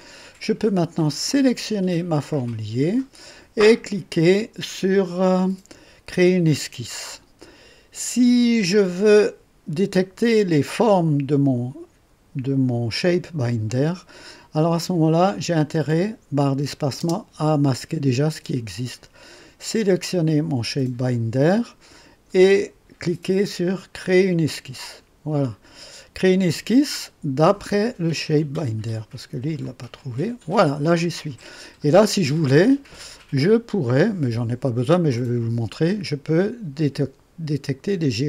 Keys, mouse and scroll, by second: 1.3 click, 15.5 click, 17.0 space, 19.9 click, 24.5 click, 28.3 click, 29.6 click, 31.2 right click, 32.0 scroll up 1, 35.1 click.